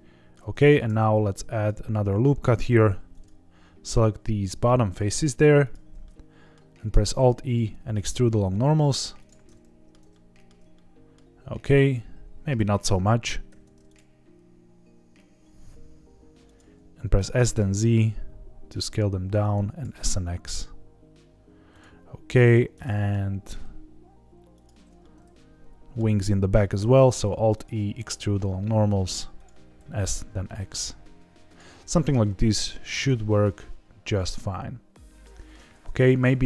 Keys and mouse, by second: 0.6 ctrl+r, 2.5 click, 2.8 3, 3.1 click, 4.0 middle click, 5.6 shift+click, 6.0 middle click, 6.8 alt+e, 9.1 click, 9.4 middle click, 10.1 shift+middle click, 10.7 middle click, 12.6 ctrl+z, 13.4 alt+e, 16.4 click, 17.1 s, 17.3 z, 19.4 click, 19.8 s, 20.0 x, 21.7 click, 22.3 click, 22.7 middle click, 24.5 shift+click, 25.0 middle click, 26.7 alt+e, 29.3 click, 29.7 s, 30.0 x, 31.4 click, 31.8 middle click, 32.6-35.2 middle drag, 35.7 z.